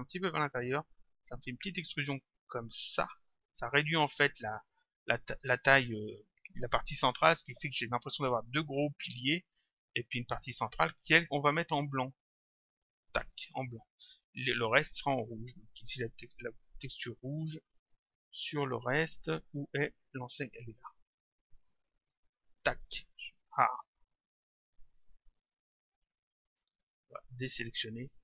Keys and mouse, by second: 3.8 click, 12.2 click, 15.4 click, 24.8 click, 26.1 click.